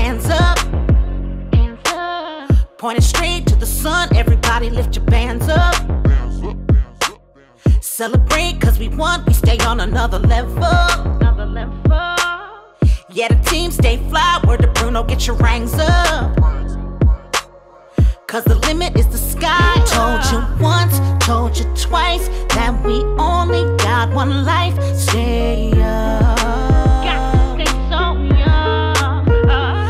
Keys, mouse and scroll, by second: 4.7-9.1 typing, 10.1-10.5 typing, 10.7 Return, 11.7 click, 12.8-13.4 scroll up 1, 14.1-14.4 scroll down 1, 14.8 click, 15.9 space, 20.1-22.6 drag, 26.3 5, 26.6 5, 26.9 Return, 27.9 click, 28.5-29.4 typing.